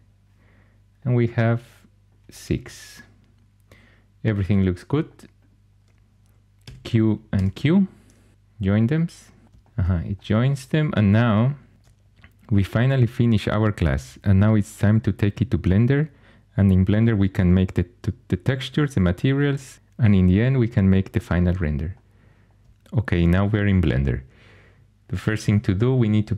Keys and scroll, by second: 6.5 q, 7.2 q.